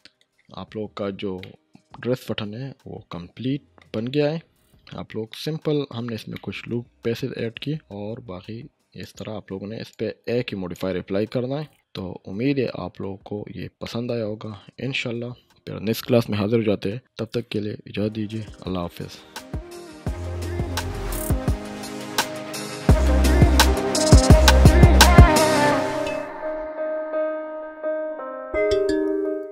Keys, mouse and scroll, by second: 0.4 scroll up 1, 1.4-3.9 middle drag, 4.2-5.0 scroll up 1, 5.3-5.9 middle click, 9.0-10.8 drag, 11.4-11.8 scroll up 1, 11.8-13.0 middle drag.